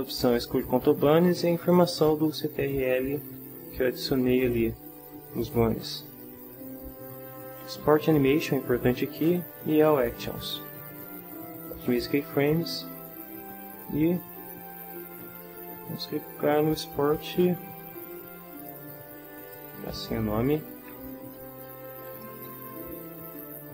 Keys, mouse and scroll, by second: 7.9 click, 9.8 click, 14.9 click, 19.4 scroll up 2, 19.4 click, 20.3-22.9 typing.